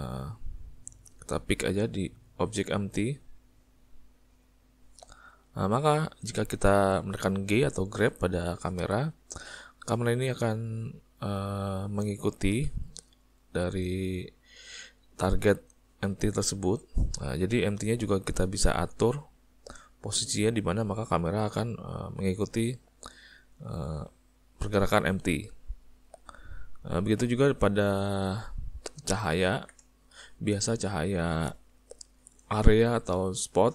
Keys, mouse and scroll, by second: 12.5 g, 15.8 middle click, 16.6 middle click, 17.4 middle click, 18.9 click, 26.8 click, 29.3 ctrl+middle click, 29.9 shift+middle click, 30.2 middle click, 32.7 middle click.